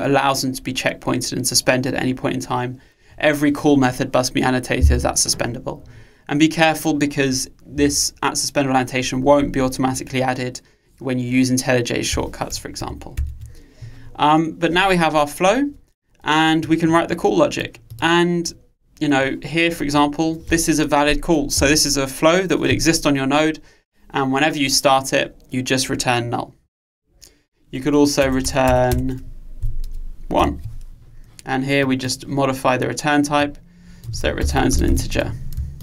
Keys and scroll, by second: 12.9 super+1.